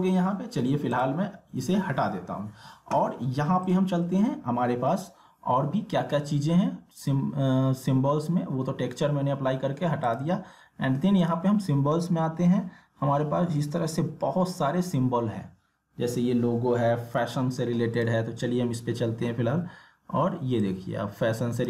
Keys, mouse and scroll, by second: 3.6 click, 10.0 click, 18.0 click, 20.6-21.6 drag.